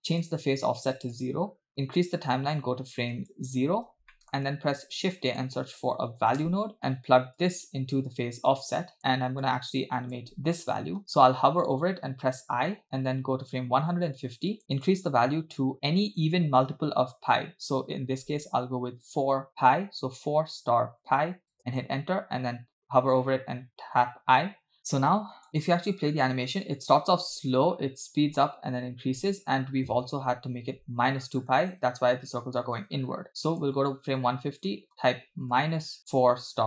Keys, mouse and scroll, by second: 0.2-1.3 drag, 1.7 click, 3.3 click, 4.1 middle click, 4.9 shift+a, 7.4-9.0 drag, 9.4 click, 12.5 i, 14.8-21.6 drag, 24.3 i, 24.9 click, 25.9 space, 29.9 space, 32.0 space, 32.8 space, 33.7 drag, 34.6-36.6 drag.